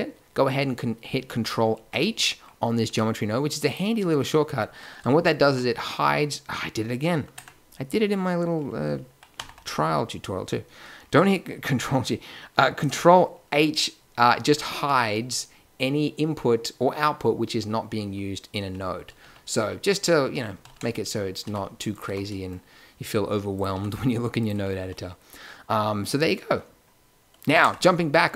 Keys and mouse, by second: 1.7 ctrl+h, 2.8 g, 5.4 ctrl+g, 7.3 Tab, 9.3 alt+g, 13.9 ctrl+h, 14.4 ctrl+h, 14.7 ctrl+h, 15.1 ctrl+h, 17.9 ctrl+h, 18.6 ctrl+h, 19.0 ctrl+h, 19.2 ctrl+h, 19.6 ctrl+h, 20.6 ctrl+h, 21.4 g, 22.0 a, 23.5-24.3 drag, 23.7 g, 24.8 a.